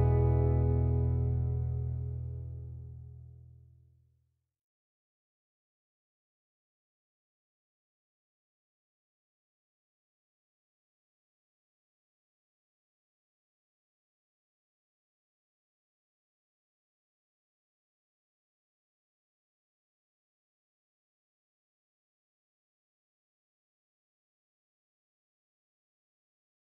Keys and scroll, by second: 1.4 b, 6.0 Escape, 17.7-19.1 typing, 20.9-21.4 Escape, 21.6 Escape.